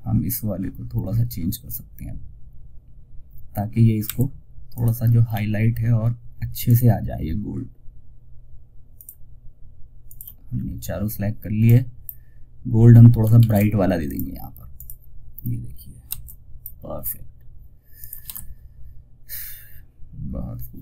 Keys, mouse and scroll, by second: 4.0 click, 8.2 shift+click, 9.8 scroll down 1, 10.9-12.6 drag, 13.3-17.4 drag.